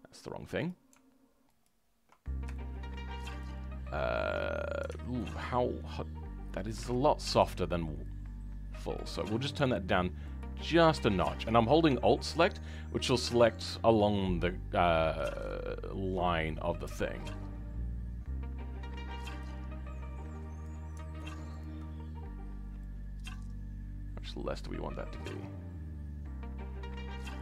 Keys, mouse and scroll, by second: 2.5-5.3 shift+middle drag, 6.8-8.3 right drag, 6.8 shift+middle click, 8.3-21.5 drag.